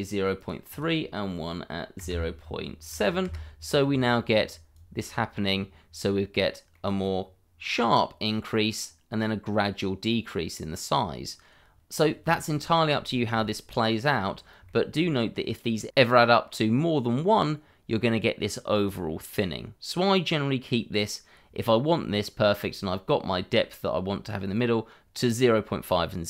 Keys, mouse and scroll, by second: 0.7 double click, 2.0 KP_0, 2.1 KP_Decimal, 2.9 KP_7, 3.2 Return, 3.8 scroll down 1, 4.2 middle click, 4.7 click, 6.1 scroll up 1, 6.7 middle click, 14.6 shift+middle click.